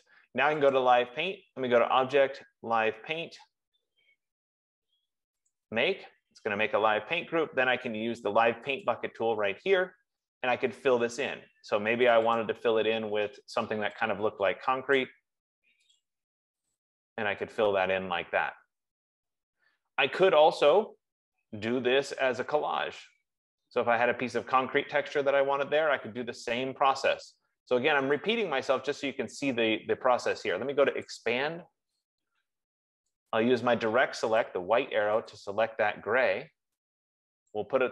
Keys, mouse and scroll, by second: 1.3 click, 6.1 click, 9.2 click, 12.4 click, 12.9 click, 15.4 click, 16.4 click, 17.2 click, 28.6 click, 31.5 click, 34.8 click, 35.8 click, 37.8 click.